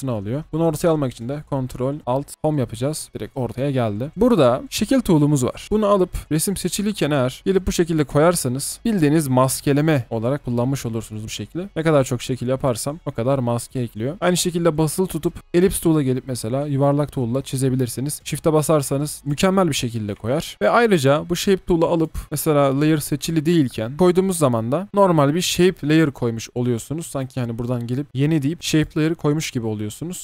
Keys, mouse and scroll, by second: 2.3 ctrl+alt+Home, 20.4 shift+click, 27.1 right click.